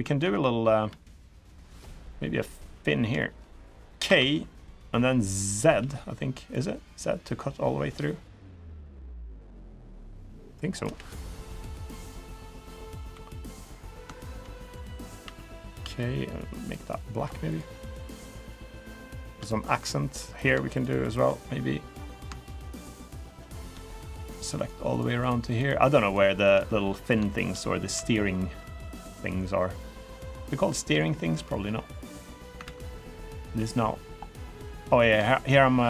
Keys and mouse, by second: 0.6 KP_3, 1.6 shift+middle click, 2.9 shift+middle click, 3.8 k, 10.9-12.8 middle drag, 12.9 3, 13.3 click, 13.9 shift+click, 15.0 g, 16.7 middle click, 17.9-19.0 middle drag, 19.2 shift+middle click, 19.5 middle click, 19.9 3, 20.1 click, 20.8 shift+click, 22.2 click, 22.8 middle click, 24.0 shift+click, 24.3 shift+click, 24.6 shift+click, 25.2 shift+click, 25.8 shift+click, 26.4 middle click, 27.1 shift+middle click, 29.8 middle click, 30.8 shift+middle click, 31.2-32.2 middle drag, 32.4 ctrl+z, 32.7-33.9 middle drag, 34.2 middle click, 35.0 shift+middle click, 35.4 middle click.